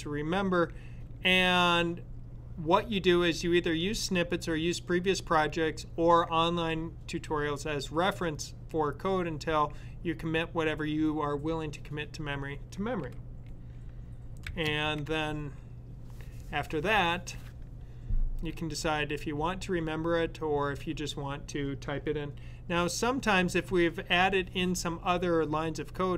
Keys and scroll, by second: 14.2 ,.